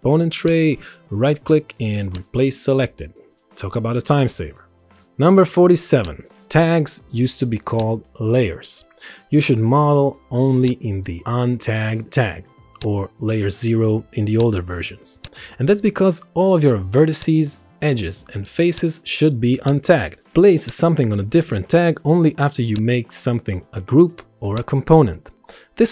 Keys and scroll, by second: 12.0 x, 12.2 y, 15.1 ctrl+1.